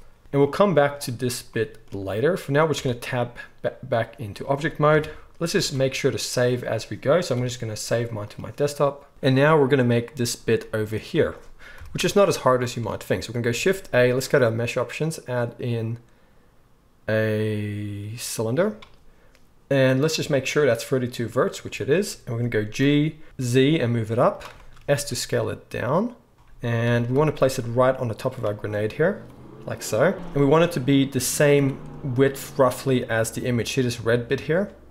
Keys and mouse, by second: 2.7 Tab, 4.9 KP_1, 5.6 ctrl+a, 7.4 ctrl+s, 10.6-20.1 middle drag, 11.7 KP_1, 13.5 shift+a, 20.1-24.4 drag, 22.8 g, 24.4-34.9 shift+middle drag, 24.9 s, 26.8 g, 30.1 KP_1, 31.5 z.